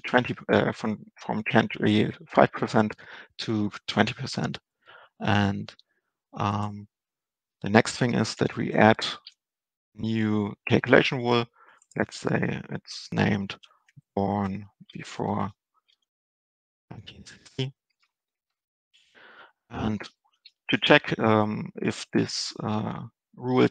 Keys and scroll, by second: 9.3 ctrl+space, 18.9 Down.